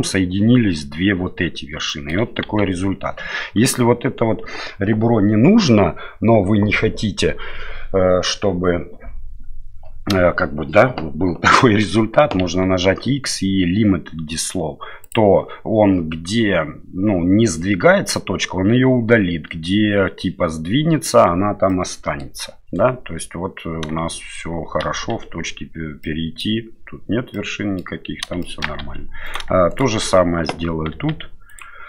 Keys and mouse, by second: 1.9 middle click, 2.5 ctrl+z, 11.6 middle click, 12.4 x, 21.7 middle click, 24.8 1, 26.0 middle click, 27.3 middle click, 28.4 shift+middle click, 28.8 2, 29.2 right click, 29.7 shift+right click, 30.9 x.